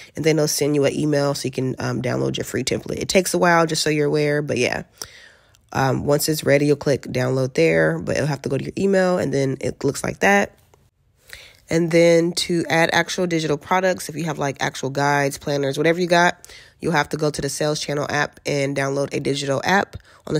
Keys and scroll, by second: 3.5 alt+q.